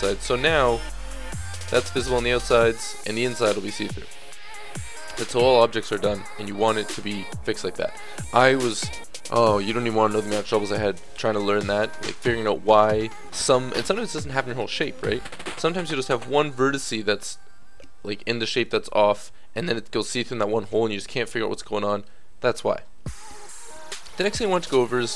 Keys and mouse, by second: 4.0 middle click, 4.9-15.1 middle drag, 15.1 Tab, 16.3-18.6 middle drag, 18.8 middle click, 20.0-24.7 middle drag, 24.9 Tab.